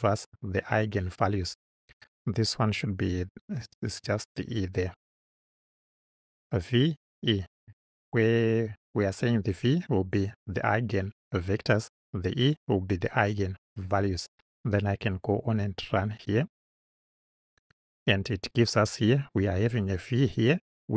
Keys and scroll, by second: 3.6 BackSpace.